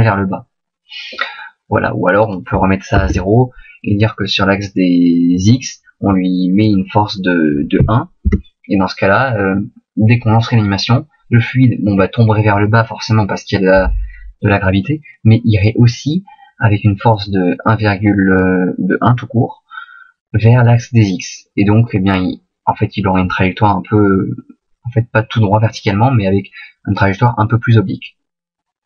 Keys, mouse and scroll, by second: 2.2 click.